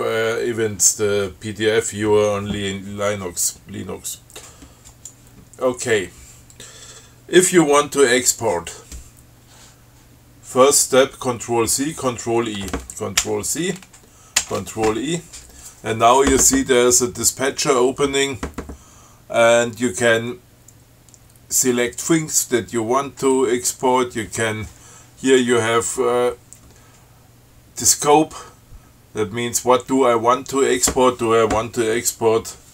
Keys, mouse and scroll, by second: 5.2 click, 13.5 ctrl+c, 14.7 ctrl+e.